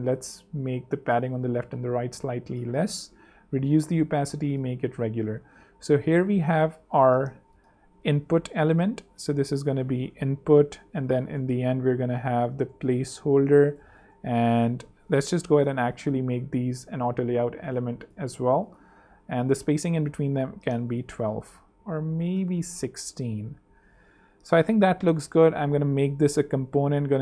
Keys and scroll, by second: 0.0-1.4 typing, 2.7 super+6, 4.8 super+3, 6.1 super+2, 9.6 super+r, 9.9 shift+super+i, 10.1-14.0 typing, 11.7 super+Return, 11.7 super+r, 12.0 shift+super+t, 15.7 shift+a, 17.2 ↺, 19.1-19.9 typing, 20.0 super+Return, 20.1 super+3, 21.1 super+2, 22.2-23.0 typing, 23.8 super+2, 25.6 alt+super+k, 26.0 alt+super+l, 26.5 alt+super+r, 27.1 shift+super+r.